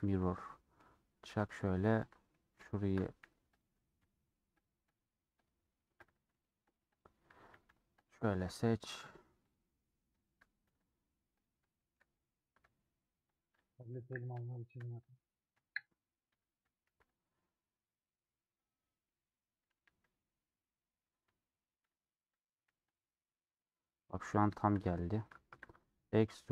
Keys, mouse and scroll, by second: 0.1 middle click, 0.8-1.7 scroll up 3, 1.7 2, 1.9 alt+click, 2.3 middle click, 3.2 1, 4.8 click, 8.2 shift+middle click, 9.1 click, 9.6 click, 10.1 shift+middle click, 10.6 g, 11.7 shift+middle click, 12.1-13.9 drag, 13.9 j, 14.4 shift+middle click, 15.2 click, 16.6 j, 17.0 alt+click, 17.6 scroll down 1, 17.8-19.8 middle drag, 19.8 1, 21.1 click, 21.8 shift+click, 22.2 j, 22.8 alt+click, 23.8 scroll down 2, 23.9 middle click, 24.7-25.0 scroll up 2, 25.1 middle click, 25.8 e.